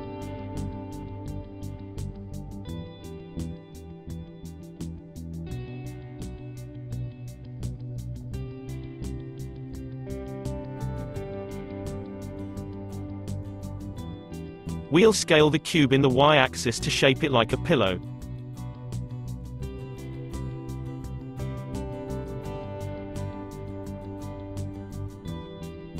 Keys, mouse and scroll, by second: 0.9-3.3 drag, 3.3 n, 6.2 click, 9.0-9.4 scroll down 1, 9.4-11.3 shift+middle drag, 11.3 click, 11.6-14.0 middle drag, 14.0 s, 17.8 click, 18.8-20.1 middle drag, 20.1 s, 22.1 s, 23.9 s, 25.8-25.9 drag.